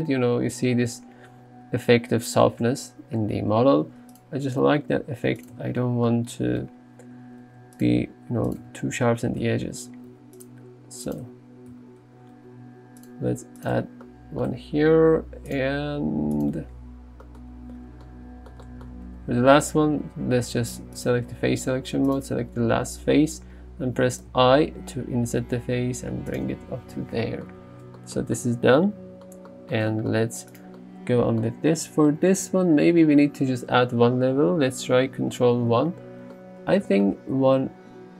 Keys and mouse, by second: 2.7 Tab, 3.9 ctrl+r, 5.6 Tab, 6.7 Tab, 7.5 ctrl+r, 7.8 click, 8.5 click, 8.7 Tab, 9.5 Tab, 10.2 ctrl+r, 10.5 click, 11.1 click, 11.3 Tab, 11.8 Tab, 12.4 ctrl+r, 13.1 click, 13.6 click, 13.8 Tab, 14.5 Tab, 15.2 ctrl+r, 15.6 click, 16.4 click, 16.6 Tab, 19.2 Tab, 21.0 click, 22.2 click, 24.3 i, 26.5 Tab, 30.6 click, 35.7 ctrl+1.